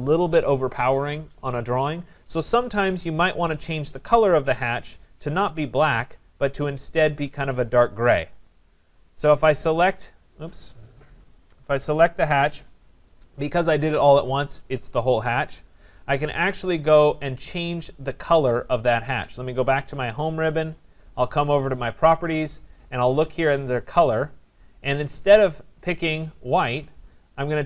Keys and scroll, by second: 11.3 Escape.